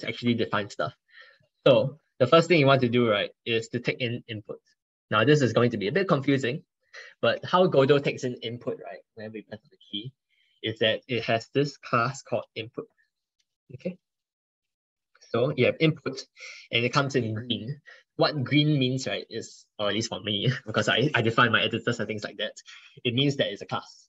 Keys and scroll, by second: 0.0 ctrl+BackSpace.